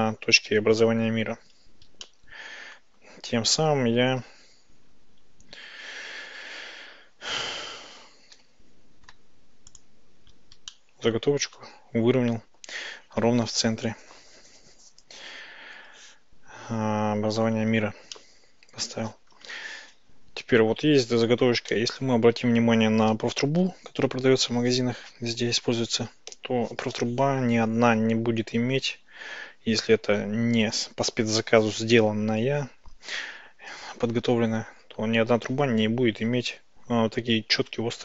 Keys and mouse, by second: 2.1-2.8 shift+middle drag, 10.8-11.6 shift+middle drag, 18.2-19.0 shift+middle drag, 21.8-23.2 shift+middle drag.